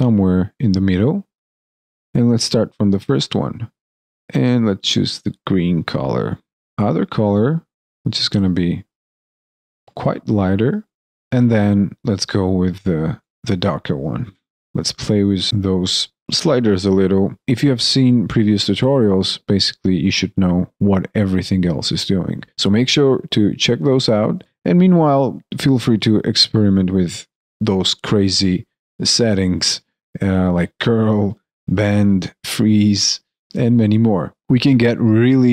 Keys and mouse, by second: 33.3 alt+click, 33.8 alt+middle click, 34.2 alt+right click.